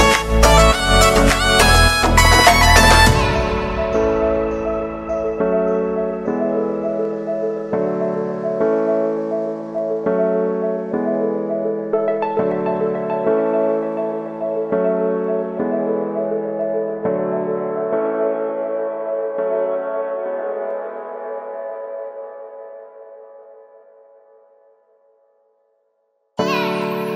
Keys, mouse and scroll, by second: 3.5 space, 6.3 click, 6.8 space, 9.7 click, 10.3 [, 11.4 click, 11.5 click, 11.8 space, 13.9-16.0 drag, 16.0 space, 18.0-21.1 drag, 21.1 space, 25.7 click.